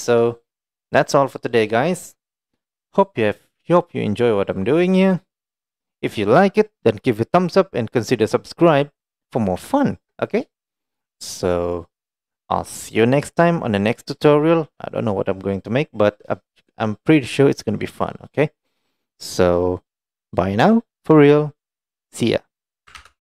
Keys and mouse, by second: 0.0 shift+middle drag, 0.6 middle click, 1.1 click, 1.7-2.1 middle drag, 4.8 click, 9.8 shift+middle click, 10.5-14.1 middle drag, 15.0-16.2 middle drag.